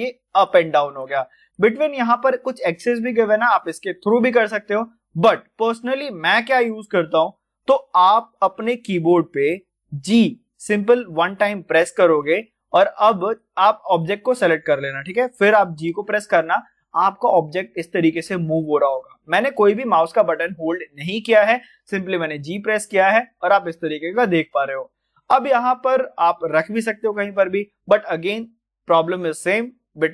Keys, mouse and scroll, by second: 11.2 g, 13.1 middle click, 13.9 click, 15.7 g, 27.1 click.